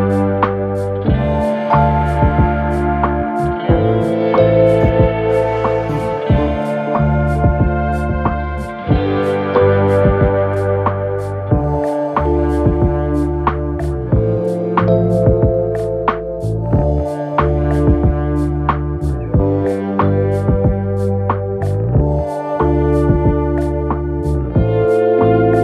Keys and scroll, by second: 1.8 4, 5.3 3, 5.7 ], 6.9 ctrl+d, 7.0 Escape, 12.8 f, 17.1 ctrl+d, 17.2 Escape, 18.6 ], 21.7 4.